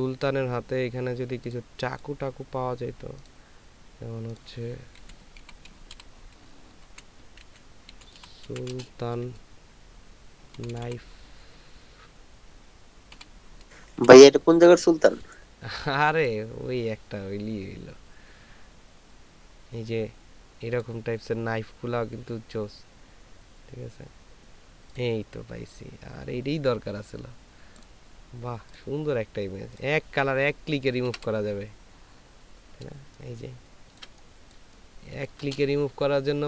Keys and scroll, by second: 5.3-8.7 typing, 10.6 k, 10.7 n, 10.8 i, 13.1 f, 14.0 e, 14.1 Return, 31.1 ctrl+v, 33.0 ctrl+space, 34.6 ctrl+space.